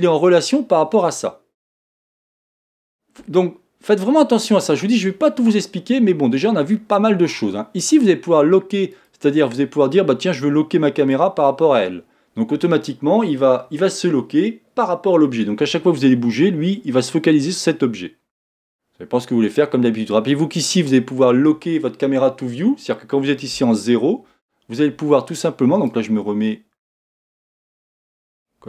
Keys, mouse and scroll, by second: 8.9 click, 16.0-19.0 middle drag, 23.5 KP_0, 25.8-28.6 drag.